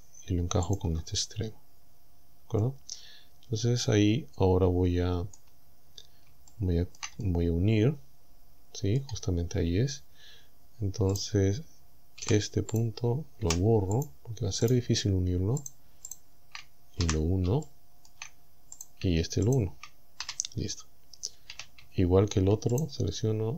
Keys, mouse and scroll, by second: 0.7 ctrl+click, 1.3-2.1 scroll down 4, 2.5 scroll down 2, 2.6-5.6 middle drag, 5.9-6.3 scroll up 2, 6.4 shift+scroll down 2, 6.5 shift+middle click, 7.3 shift+middle click, 7.5-9.2 right drag, 9.3-9.7 scroll up 2, 10.0-10.3 scroll up 2, 11.2 right click, 12.3 g, 12.8 click, 13.5 Delete, 14.0 click, 14.7 right click, 15.7 shift+right click, 16.1 shift+right click, 17.1 f, 17.7 shift+middle click, 18.8 right click, 19.5 shift+right click, 20.3 f, 20.6-20.9 scroll down 1, 21.5 a, 22.8 alt+shift+right click.